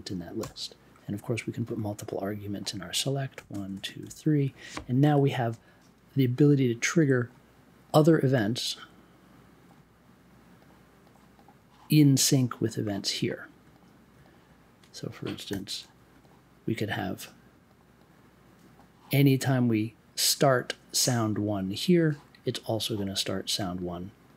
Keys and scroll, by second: 0.4 BackSpace, 3.1-4.5 typing, 5.0 super+j, 15.5 m.